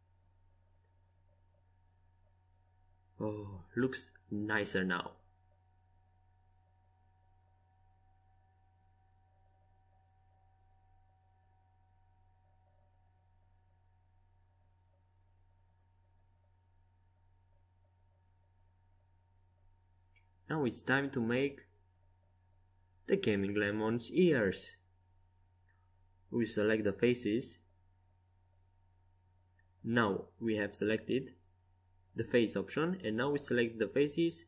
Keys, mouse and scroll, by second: 1.8 t, 5.2-7.8 middle drag, 19.6 z, 20.7-22.3 middle drag, 24.2 z, 24.7 z, 25.8-26.9 right drag, 26.1 Tab, 30.7-33.0 drag, 31.4-34.4 right drag.